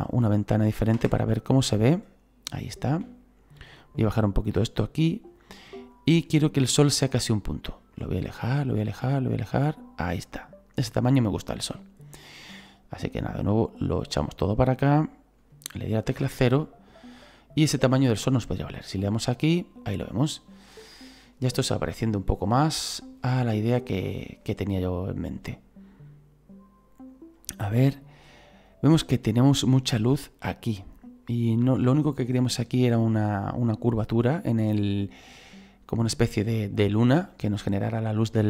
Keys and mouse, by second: 0.9 KP_0, 1.8 middle click, 3.8 right click, 4.6 click, 5.9 right click, 7.5 right click, 13.5 click, 16.1 KP_0, 17.2 right click, 19.0 click, 21.6 right click, 23.5 right click, 25.4 click, 27.3 right click.